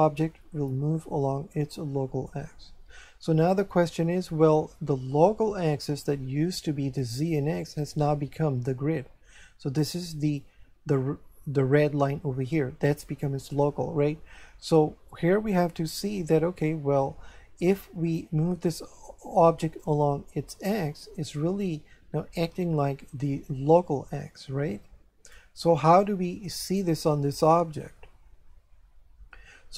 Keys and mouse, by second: 19.8 click, 26.6 right click.